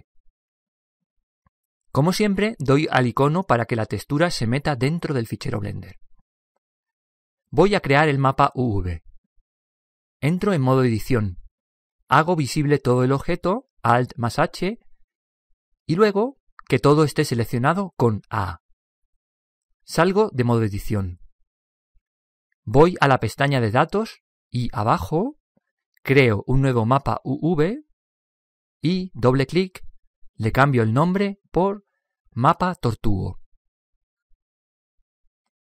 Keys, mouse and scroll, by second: 4.1-6.0 drag, 10.4 Tab, 12.0 Tab, 14.5 alt+h, 18.8 a, 19.4 a, 20.4 Tab, 21.6 Tab, 23.7-24.7 drag, 24.7-25.2 scroll down 3, 24.9 click, 25.1 click, 25.2-26.2 drag, 26.5-29.4 drag.